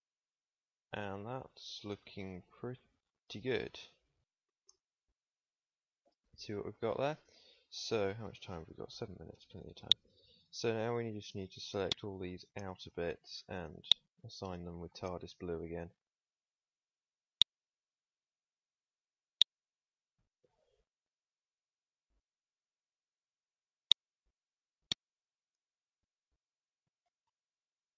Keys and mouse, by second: 3.3 Tab, 7.0 Tab, 13.7 click, 14.8-15.9 middle drag, 21.2 middle click, 22.1-23.4 middle drag, 27.2 middle click.